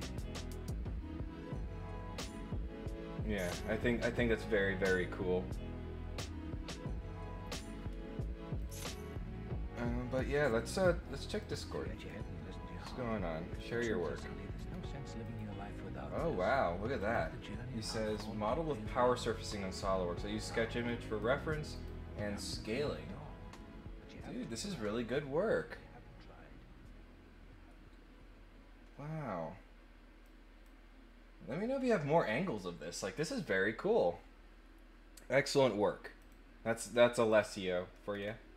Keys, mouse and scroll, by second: 8.6 click, 11.4 click, 11.9 click, 13.6 click, 14.5 scroll down 4, 15.2 click, 16.9 click, 18.1-21.1 drag, 21.7 click, 30.2 click, 36.1 click, 37.2 click, 38.1 middle click, 38.1 scroll down 1.